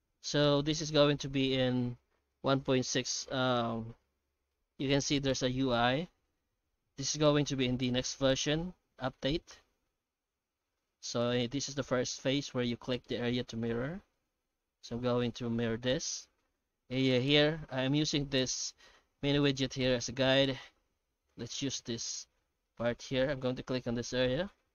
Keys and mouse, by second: 19.8-24.7 middle drag.